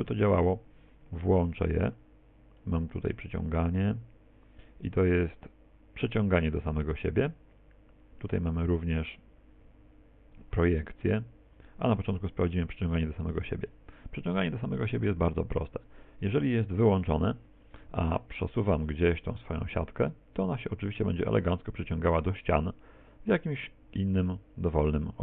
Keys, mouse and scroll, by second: 18.0 click, 18.0 g.